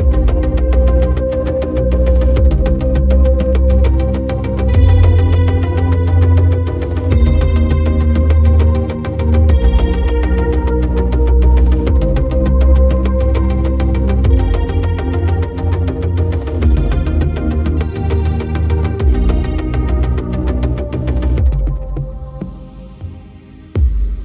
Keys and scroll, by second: 2.2 ctrl+t.